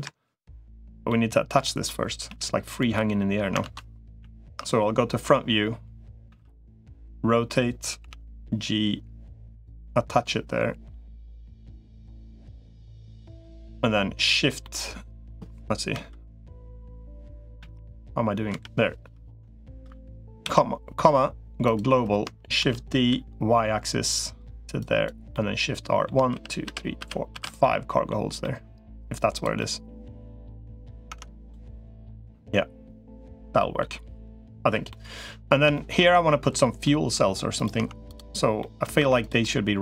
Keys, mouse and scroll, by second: 0.9 middle click, 2.1 g, 3.5 ctrl+z, 4.1 KP_1, 6.1 r, 7.9 g, 9.6-10.9 middle drag, 11.3 middle click, 12.2 middle click, 13.2 middle click, 14.4 middle click, 15.7 KP_3, 17.5 KP_1, 18.3 KP_3, 19.3 shift+middle click, 20.3 ,, 22.5 shift+d, 25.1 middle click, 26.1 shift+r, 26.5 shift+r, 26.9 shift+r, 27.1 shift+r, 27.4 middle click, 28.2 middle click, 29.1 click, 29.4-30.7 middle drag, 30.9 Tab, 31.5-33.6 middle drag, 34.7 middle click, 35.5 shift+middle click, 35.9 middle click, 36.6 middle click, 37.7 Tab, 38.4 middle click, 38.9 Tab, 39.2 middle click, 39.7 Tab.